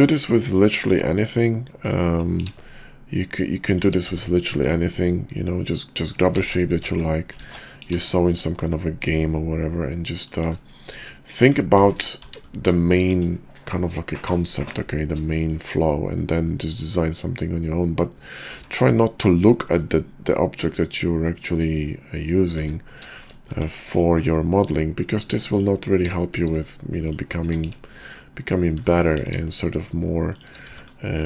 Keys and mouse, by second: 0.4 click, 0.8 Tab, 1.7 click, 2.3 ctrl+b, 4.0 Tab, 5.2-6.0 drag, 6.1 click, 6.4 ctrl+z, 6.7 ctrl+z, 7.4 ctrl+z, 7.8 ctrl+b, 11.1 click, 12.2 Tab, 12.8 shift+click, 13.1 KP_5, 14.4 click, 15.3 shift+drag, 16.7-18.3 middle drag, 19.4 shift+middle drag, 20.4-22.3 middle drag, 23.1 shift+drag, 23.5 Tab, 25.4-26.9 drag, 27.1 click, 27.6 ctrl+shift+b, 29.2 ctrl+b, 30.7 Tab.